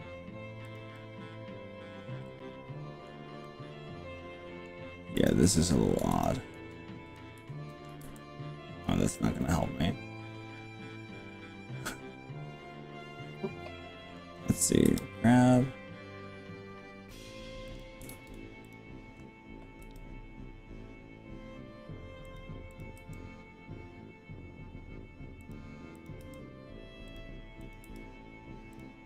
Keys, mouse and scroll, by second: 0.8 click, 0.9-3.2 middle drag, 3.4-4.8 middle drag, 5.2 click, 6.2 shift+drag, 8.0 shift+KP_7, 10.6 scroll up 1, 10.9-11.4 scroll down 4, 11.6 scroll up 2, 11.9-14.2 middle drag, 14.9 g, 17.8 click, 18.2 ctrl+z, 18.8 click, 19.8 g, 22.4 click, 22.8 click, 23.0 g, 25.4 click, 26.0 click, 26.2 g, 27.6 click, 27.9 g.